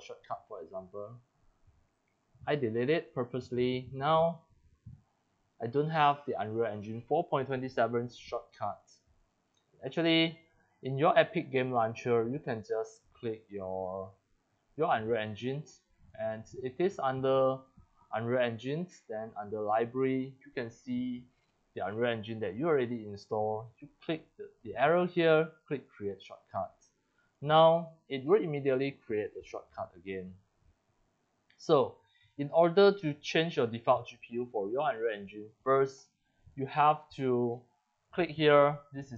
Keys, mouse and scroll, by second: 0.4 click, 0.8 click, 1.9 Delete, 3.0 click, 3.4 Delete, 4.1 click, 4.8 click, 5.9 click, 6.2 drag, 8.7 click, 9.2 click, 10.1 click, 12.2 click, 13.0 click, 13.7 click, 15.1 click, 15.9 click, 17.5 click, 18.2 click, 18.9 click, 24.1 click, 25.8 click, 27.3 drag, 27.7 click, 29.8 click, 30.6 click, 31.5 click, 35.5 click, 35.6 click, 36.4 click, 38.0 click.